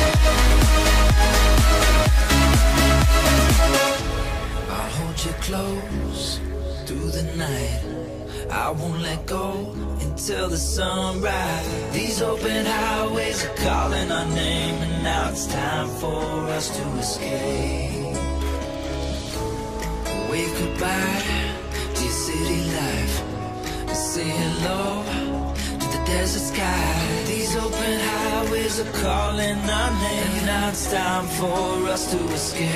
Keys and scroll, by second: 13.1 Tab, 23.6 Return, 24.3 Return, 29.1 Return, 30.0 Return.